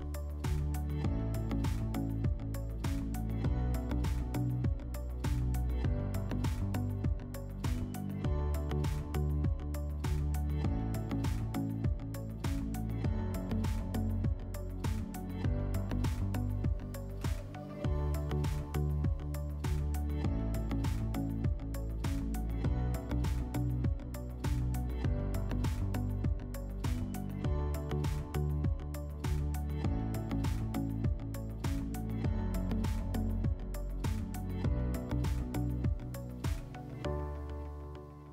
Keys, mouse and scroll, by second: 1.6 click, 3.6 right click, 4.5 click, 5.8 click, 7.1 alt+middle click, 9.7 click, 10.6 alt+middle click, 13.3 click, 14.6 click, 17.9 click, 19.3 alt+middle click, 20.2 F4, 24.3 click, 25.9 click, 26.8 F4, 27.9 click, 28.1 click, 28.7 ctrl+click, 28.8 ctrl+click, 30.6 alt+middle click, 31.4 alt+middle click, 33.6 ctrl+click, 33.7 ctrl+click, 34.5 ctrl+click, 36.7 alt+middle click.